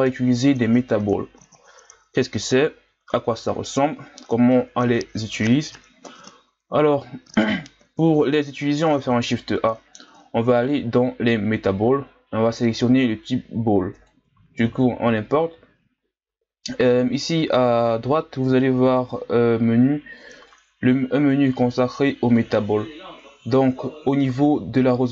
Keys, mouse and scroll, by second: 9.0 shift+a, 14.7-15.1 scroll down 2, 18.8-25.1 drag.